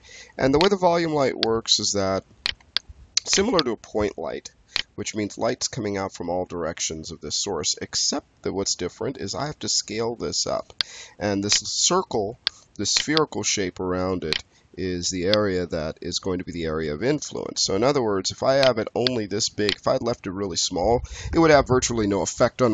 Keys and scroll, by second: 9.3 e, 9.9 r.